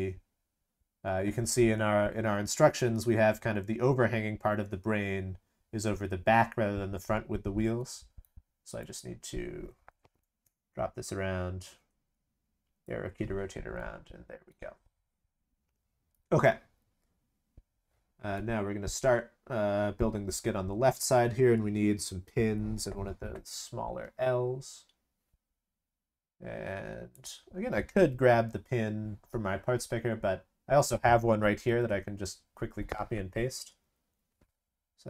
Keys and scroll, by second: 31.6 ctrl+c, 31.8 ctrl+v.